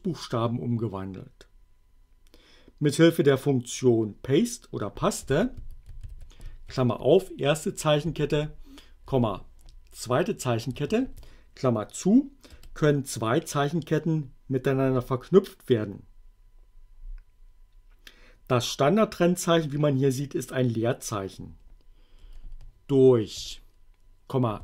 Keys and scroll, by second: 4.9-6.7 typing, 7.8-9.1 typing, 10.9 shift+9, 12.5 Return, 22.2 Up, 22.6 Left, 23.4-24.6 typing.